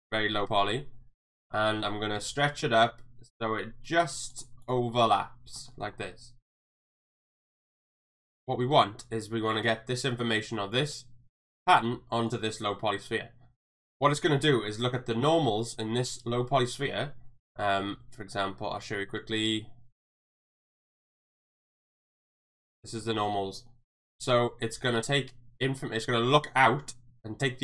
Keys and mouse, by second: 0.7 s, 4.6 click, 5.0-5.6 middle drag, 5.7 shift+middle click, 7.0 s, 7.8 Tab, 10.8 click, 12.3 click, 17.9 Tab, 18.8-22.4 drag, 22.6 middle click, 23.0 shift+middle click, 24.2 middle click.